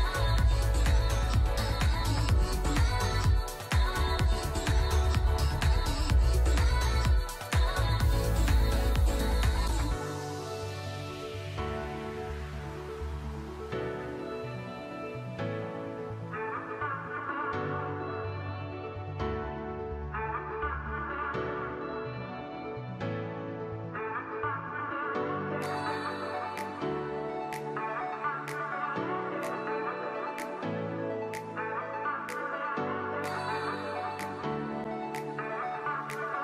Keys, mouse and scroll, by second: 12.9 double click, 31.9 double click.